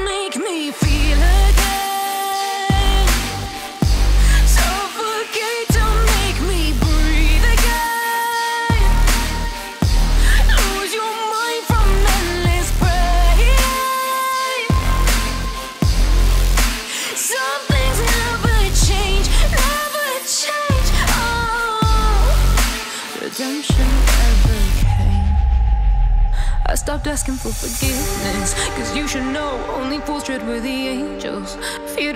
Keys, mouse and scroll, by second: 1.7 click, 2.4 e, 4.9 click, 6.0 e, 6.4 click, 7.5 click, 9.8-11.2 drag, 11.4 ctrl+z, 12.4 z, 15.2 alt+m, 17.9 alt+m, 18.9 a, 19.0 a, 19.6 a, 21.6 z, 21.6 z, 22.2 z, 22.3 z, 22.3 Tab, 23.0 Tab, 23.7 click, 24.4 shift+right click, 28.8 z, 28.9 z, 28.9 Tab, 29.7 Tab, 30.3 c, 30.8 click, 31.5 click.